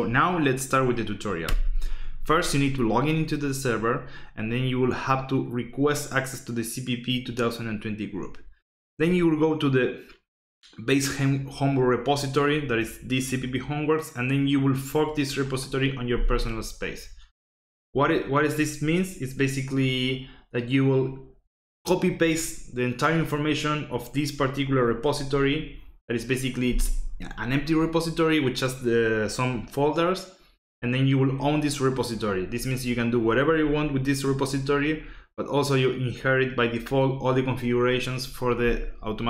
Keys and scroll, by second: 1.4 Right.